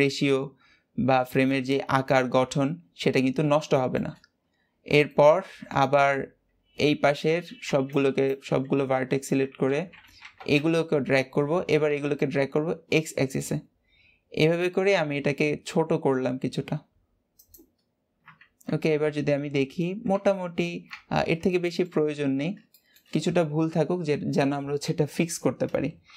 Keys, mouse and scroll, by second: 2.8-3.2 scroll down 3, 3.6 shift+middle click, 4.0-5.0 scroll down 2, 5.0-6.8 shift+middle drag, 6.8 alt+a, 7.5 b, 8.6 alt+z, 9.6 alt+z, 10.1 g, 20.7 scroll up 1, 20.8 Tab, 21.1-21.4 scroll down 3, 21.4 shift+middle click, 22.1-22.7 scroll up 3, 22.7-25.8 shift+middle drag.